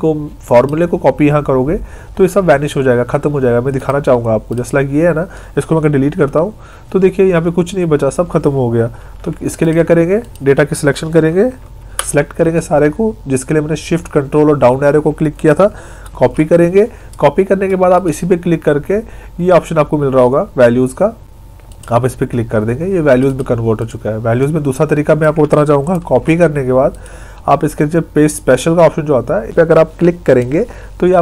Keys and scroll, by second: 6.2 Delete, 9.0 ctrl+z, 11.8 ctrl+shift+Down, 16.1 ctrl+c, 26.0 ctrl+c.